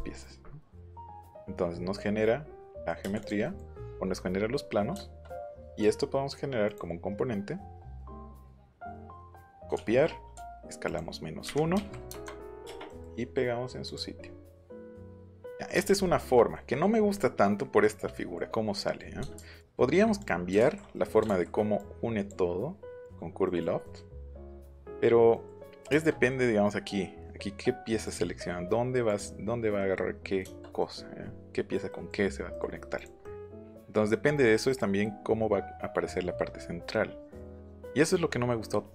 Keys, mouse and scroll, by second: 3.1 click, 5.7 right click, 6.6 click, 8.2 click, 8.5 middle click, 9.7 ctrl+c, 10.8 click, 11.4 KP_Subtract, 11.7 KP_1, 12.1 Return, 12.8 middle click, 13.8 click, 15.0 middle click, 15.5 middle click, 15.8 click, 16.0 middle click, 16.5 middle click, 17.1 middle click, 18.1 middle click, 18.7 middle click, 19.3 ctrl+z, 19.5 ctrl+z, 20.1 click, 20.6 ctrl+z, 20.9 middle click, 21.2 ctrl+z, 21.7 click, 23.0 click, 23.4 middle click, 23.8 middle click, 24.7 middle click, 25.3 middle click, 25.8 shift+middle click, 28.0 click, 29.0 click, 29.7 middle click, 30.3 middle click, 30.8-31.3 scroll up 4, 31.8 scroll up 2, 32.4 scroll up 2, 32.9 click, 37.5 middle click.